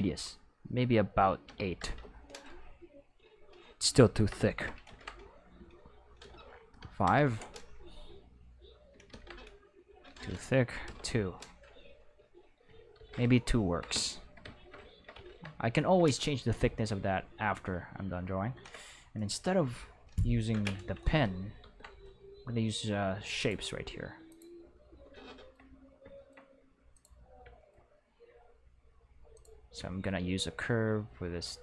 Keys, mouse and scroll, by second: 1.4 8, 1.7 Return, 2.7 click, 4.8 ctrl+z, 5.6 click, 6.6 5, 7.0 Return, 8.0 click, 9.0 ctrl+z, 9.7 click, 10.1 2, 10.8 Return, 11.6 click, 12.9 ctrl+z, 20.1 click, 21.5 ctrl+z, 23.3 click, 24.2 click, 26.9 click, 29.3 click.